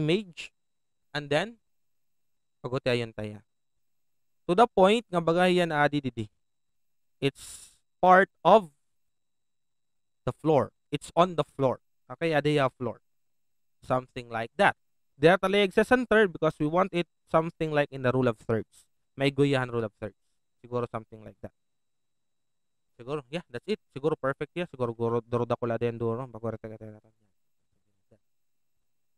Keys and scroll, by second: 26.9 alt+Return, 27.6 Return.